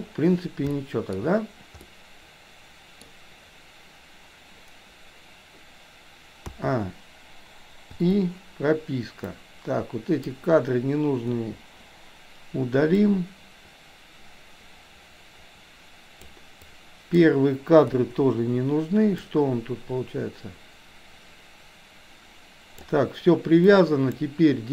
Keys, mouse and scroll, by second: 0.8-1.1 shift+middle drag, 1.9-3.1 middle drag, 6.5 a, 8.0 i, 9.3-10.4 drag, 11.4 Delete, 13.0-16.4 drag, 16.8-17.3 drag, 17.9 Delete, 19.3-22.9 drag, 23.8-24.3 drag.